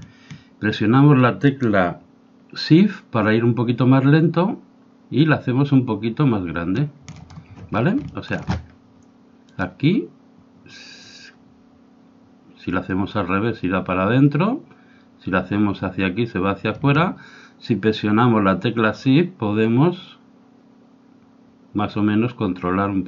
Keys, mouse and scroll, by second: 7.7-9.5 middle drag, 9.5-11.2 drag.